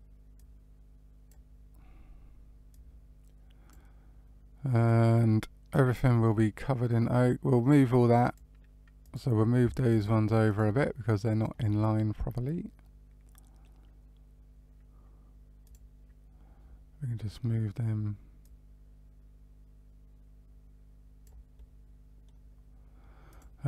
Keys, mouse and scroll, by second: 0.3 click, 2.6 click, 4.8 click, 6.8 click, 8.9 click, 9.8 shift+click, 10.4-11.5 shift+click, 11.2 shift+click, 11.7 middle click, 15.6 click, 16.5-18.0 scroll up 2, 18.3 click, 21.5 middle click, 23.2 click.